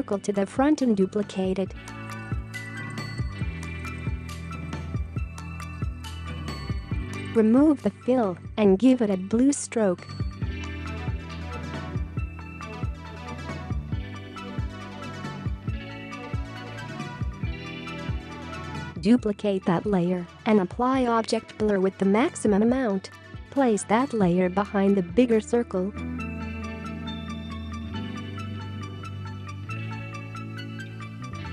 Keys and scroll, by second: 4.5 ctrl+c, 5.1 ctrl+v, 14.2 typing, 18.9 ctrl+c, 19.5 ctrl+v.